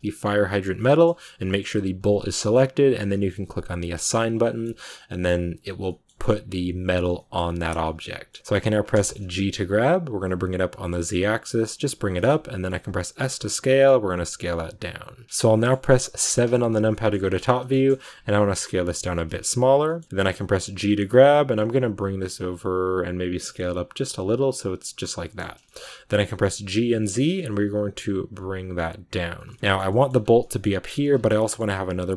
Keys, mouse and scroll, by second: 0.7 middle click, 1.2 g, 4.3 middle click, 5.2 click, 5.7-7.3 middle drag, 7.3 scroll down 2, 7.5 shift+middle click, 8.3-8.9 scroll up 1, 8.9 shift+middle click, 9.2 g, 12.2 shift+middle click, 12.9 s, 15.2 middle click, 16.1 KP_7, 16.8 shift+middle click, 17.0-17.5 scroll up 6, 17.6 shift+middle click, 18.1 s, 19.7 shift+middle click, 20.3 g, 24.7-26.1 middle drag, 26.1 g, 29.4 shift+middle click, 29.7-30.3 scroll up 3, 29.8 middle click, 30.3 middle click, 31.0 scroll down 2, 31.2-32.1 middle drag.